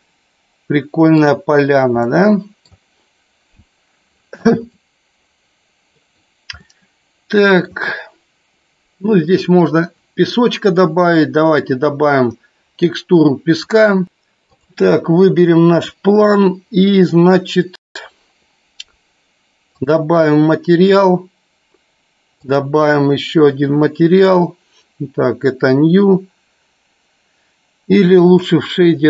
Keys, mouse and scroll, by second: 0.3-2.1 shift+middle drag, 2.8 middle click, 7.5 middle click, 11.2 click, 17.0 middle click, 22.4 click, 24.7 click.